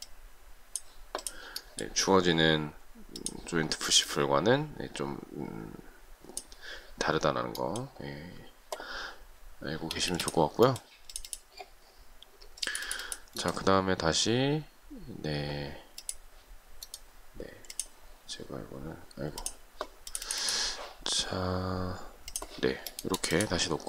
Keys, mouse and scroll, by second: 10.0 space.